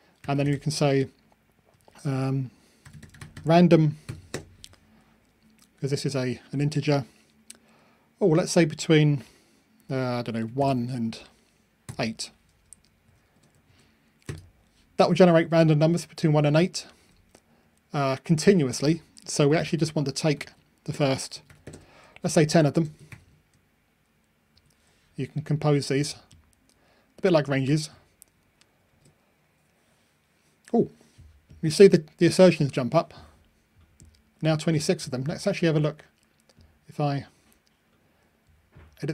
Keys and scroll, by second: 24.6 super+F9, 28.9 ctrl+r.